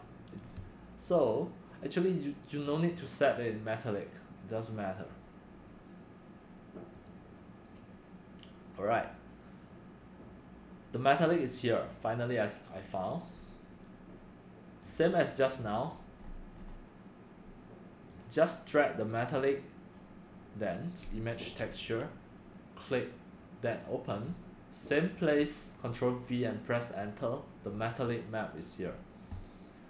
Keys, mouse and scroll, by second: 7.1 click, 7.7 click, 13.3 scroll, 13.3 scroll, 13.3 scroll, 15.0-16.2 drag, 16.2 middle click, 16.4 scroll, 16.4 scroll, 16.6 scroll, 16.8 drag, 17.5 click, 18.1-19.9 middle drag, 19.9-22.4 drag, 23.8 click, 25.5 ctrl+v, 26.7 Return, 28.0 click, 28.2 click.